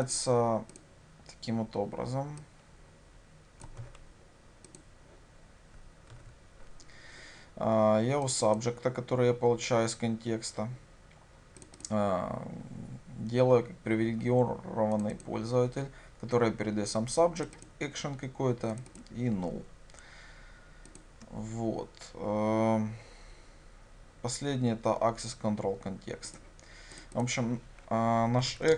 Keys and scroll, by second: 3.9 ctrl+c, 6.2 ctrl+v, 21.1 ctrl+b.